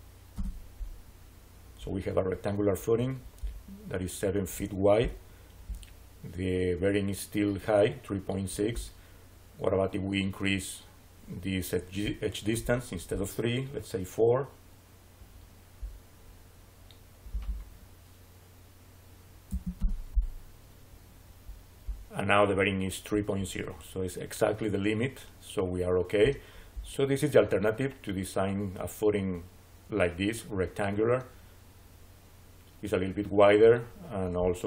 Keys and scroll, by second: 0.2 Return, 19.3 4, 19.6 Return.